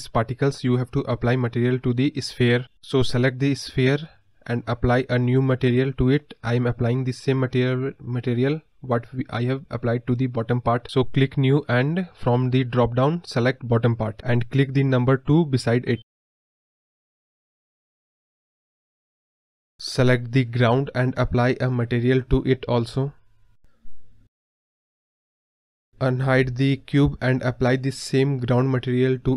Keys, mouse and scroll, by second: 0.3 scroll up 1, 0.4 scroll down 1, 0.5 scroll up 1, 0.6-1.4 scroll down 1, 1.4 scroll up 4, 1.7-2.0 scroll down 8, 2.0-2.5 scroll up 2, 2.5-12.0 middle drag, 12.0 click, 12.4-15.1 scroll up 4, 15.1 scroll up 1, 15.2-19.4 drag, 19.4 scroll down 2, 19.6-20.8 middle drag, 20.8-21.1 scroll down 2, 21.1 click, 21.3-22.3 scroll down 1, 27.3 scroll down 1, 27.4-29.3 middle drag.